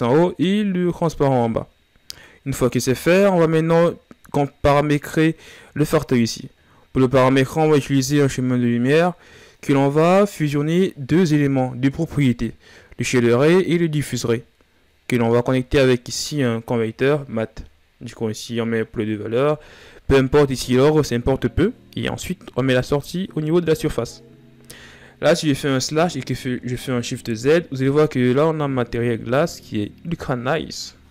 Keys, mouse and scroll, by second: 25.0 KP_Divide, 25.9 shift+z, 28.0-31.1 middle drag.